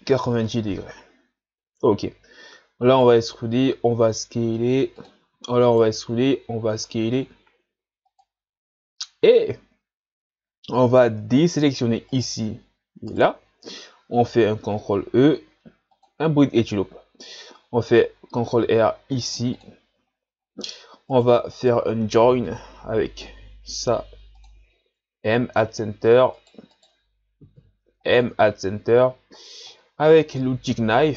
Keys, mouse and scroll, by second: 1.5-2.4 scroll down 1, 2.4 e, 8.6-9.2 ctrl+scroll down 1, 9.5-10.5 scroll up 2, 12.1 shift+right click, 13.1 shift+right click, 14.2 ctrl+e, 18.6 ctrl+r, 20.1 scroll down 2, 20.4-21.1 scroll up 3, 21.1 right click, 21.5 shift+right click, 22.4 m, 25.0 scroll down 1, 25.4 shift+scroll up 8, 26.3 right click, 26.7 shift+right click, 27.6 m, 29.1 shift+scroll down 2, 30.6 k.